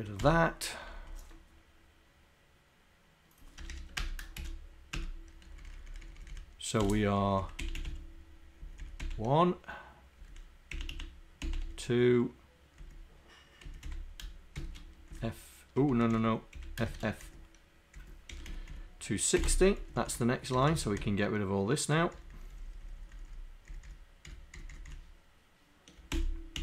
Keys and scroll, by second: 4.2 Down.